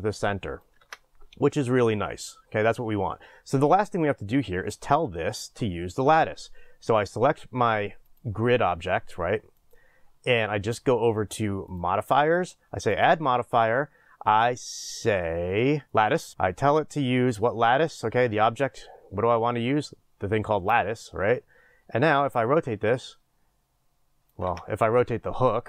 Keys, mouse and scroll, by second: 0.8 ctrl+z, 16.3-25.6 drag, 24.5 ctrl+z.